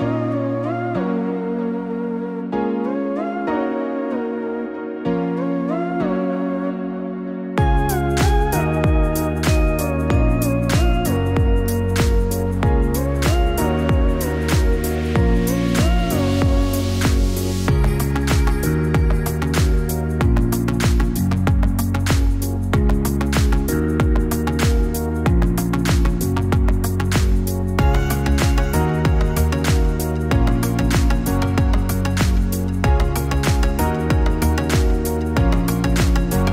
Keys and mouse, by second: 3.0-5.0 drag, 12.5-15.6 drag, 22.2-24.3 drag, 30.4-31.8 drag.